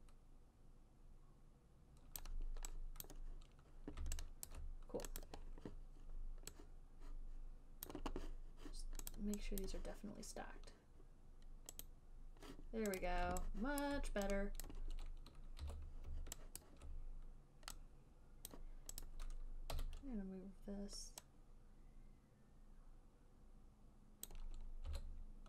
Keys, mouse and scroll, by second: 2.5 click, 3.3 click, 4.8 alt+right click, 5.5 click, 8.2 click, 9.4 click, 10.0 click, 12.1 click, 13.3 click, 14.1 alt+right click, 15.0 click, 15.9 w, 17.0 alt+right click, 18.8 click, 19.4 click, 20.1 e, 24.6 click, 25.2 w.